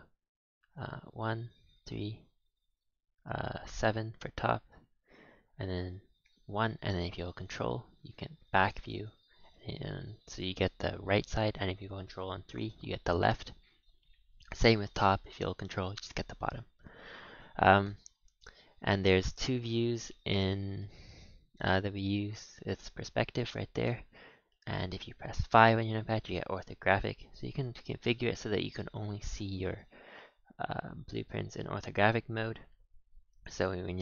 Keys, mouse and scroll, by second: 1.1 KP_1, 1.7 KP_3, 3.6 KP_7, 6.2 KP_1, 7.4 ctrl+KP_1, 10.0 KP_3, 12.5 ctrl+KP_3, 14.3 KP_7, 14.9 ctrl+KP_7, 16.3 KP_1, 17.6 scroll down 1, 17.8-18.5 middle drag, 18.5-19.1 scroll up 4, 19.1 shift+middle click, 19.3-19.8 scroll down 5, 19.8-20.3 middle drag, 20.3 scroll up 7, 20.8-21.2 shift+middle drag, 21.2-21.6 scroll down 1, 21.6-21.9 middle drag, 21.9-22.4 scroll down 1, 22.4-25.5 middle drag, 25.5 KP_5, 26.9 KP_5, 27.3 KP_5, 29.2 KP_1, 32.9 scroll down 2.